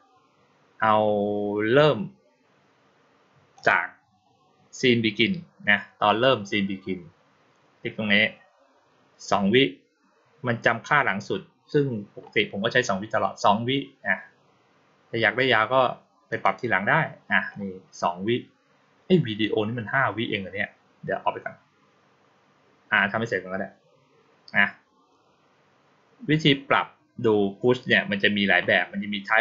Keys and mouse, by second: 3.4 click, 16.2 click.